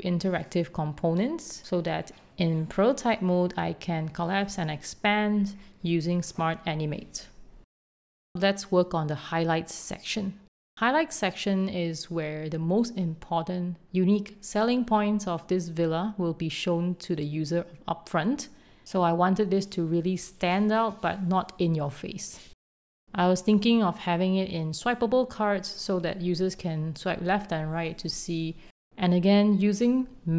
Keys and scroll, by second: 0.0-0.2 typing, 1.9 shift+s, 2.1 super+a, 2.5 shift+super+h, 3.9 shift+v, 4.4 super+z, 6.2 Escape, 7.6 super+d, 10.7 super+d, 11.0 shift+space, 11.6 shift+a, 13.8 super+z, 14.5 ↻, 15.7-18.0 typing, 21.3 shift+super+v, 22.2-23.4 typing, 23.7 Escape, 25.5 Right, 25.7 Left, 25.8-27.5 typing, 30.2 alt+Left.